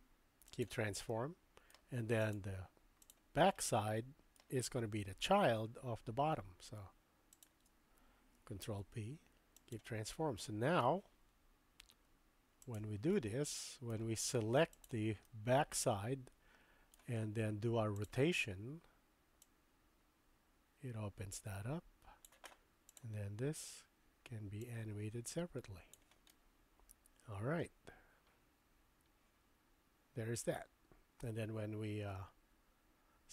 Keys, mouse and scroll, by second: 1.2-1.9 middle drag, 3.0 click, 3.6-4.7 middle drag, 7.4 shift+click, 8.6 ctrl+p, 10.1-10.8 middle drag, 12.6 click, 13.1-13.9 middle drag, 14.8 click, 15.3-16.9 middle drag, 17.9 click, 19.5-22.2 drag, 24.7-26.0 drag, 26.3-27.9 middle drag, 27.8 scroll up 1, 27.9-28.3 drag, 29.6-29.9 drag, 29.9-33.3 middle drag.